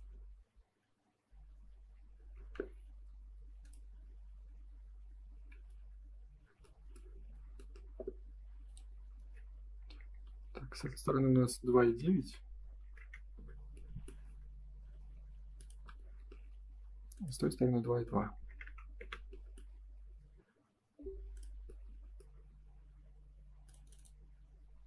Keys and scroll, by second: 2.1 Escape, 5.3 Escape, 10.3 2, 11.6 BackSpace, 12.7 9, 13.3 Return, 16.6 Escape, 18.9 Return, 22.3 space.